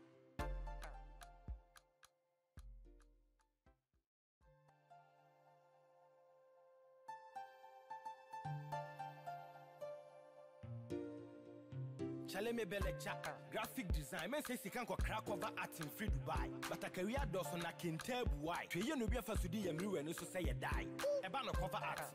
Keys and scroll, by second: 9.9 Return.